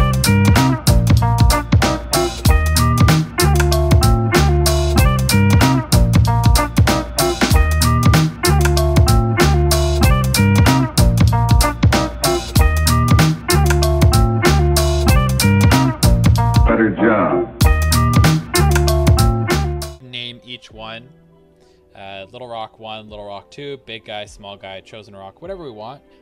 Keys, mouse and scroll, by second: 0.3 a, 0.7 click, 0.9-2.4 middle drag, 2.1 Tab, 2.4 click, 2.4-3.5 middle drag, 3.3-4.5 typing, 3.5 shift+click, 3.7 click, 4.0 click, 4.1 middle click, 4.4 click, 4.7 click, 5.1 middle click, 5.4 click, 5.4 shift+click, 5.5 middle click, 5.6 shift+click, 5.7-9.0 typing, 5.9 click, 6.1 middle click, 6.5 click, 6.7 click, 6.8 click, 6.9 click, 7.1 middle click, 8.2 click, 8.4 middle click, 8.7 click, 9.3 middle click, 10.0 click, 10.1-12.5 typing, 10.4 click, 10.6 middle click, 11.2 click, 11.3 middle click, 11.9 click, 12.1 middle click, 12.2 click, 12.6 click, 12.7-14.5 middle drag, 14.1 scroll, 14.5 click, 14.6 KP_1, 15.1 middle click, 15.3 a, 15.5 click, 15.6-16.8 middle drag.